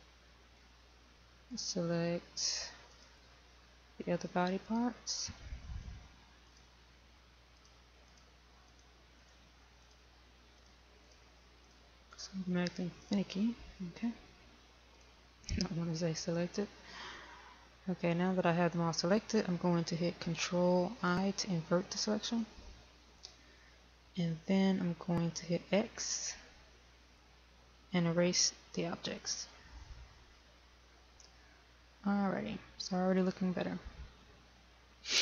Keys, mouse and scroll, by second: 2.3 shift+click, 3.7 shift+click, 5.4 shift+click, 12.9 shift+click, 13.8 shift+click, 17.5-20.1 scroll down 1, 23.0 ctrl+i, 27.0 x, 30.1 click.